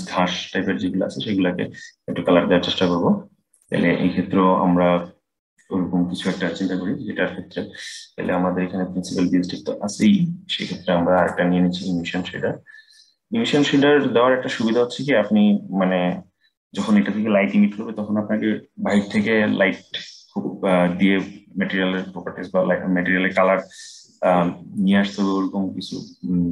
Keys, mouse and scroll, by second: 1.8-3.6 middle drag, 3.6-7.0 scroll down 3, 8.0-14.0 drag.